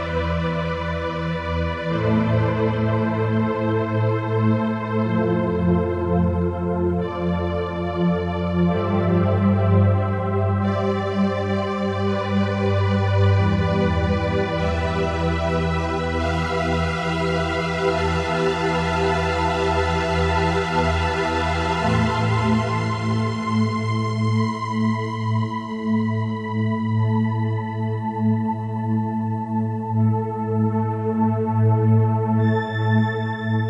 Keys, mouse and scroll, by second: 25.6 click, 27.2 click, 30.4 p, 31.8 g.